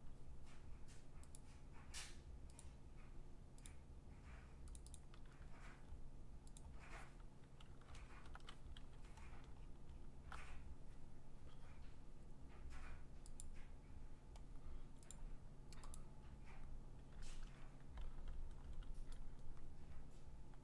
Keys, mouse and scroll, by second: 1.4 click, 2.6 click, 3.7 click, 4.8 click, 5.0 click, 6.6 click, 8.0 alt+BackSpace, 8.8 ctrl+d, 9.2-9.6 scroll, 9.9-10.9 scroll down 13, 11.6-12.2 scroll down 4, 12.2 scroll up 1, 12.4-13.3 scroll down 3, 13.4 click, 15.1 click, 15.9 click, 16.7-17.1 scroll down 4, 17.1 scroll, 18.6 g.